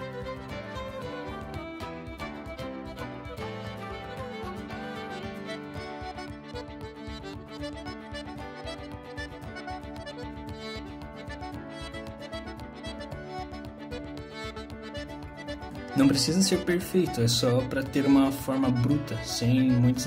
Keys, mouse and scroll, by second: 0.5 click, 1.0 g, 1.7 click, 1.8 g, 2.8 click, 2.9 g, 3.7 shift+click, 4.2 click, 4.5 g, 5.1 click, 5.4 shift+click, 5.8 r, 10.5 ctrl+z, 10.9 s, 14.2 g, 15.7-16.0 scroll up 3, 16.0 alt+middle click, 16.8 alt+middle click, 17.3 alt+middle click, 17.9 click, 18.7 shift+middle click, 18.7 click.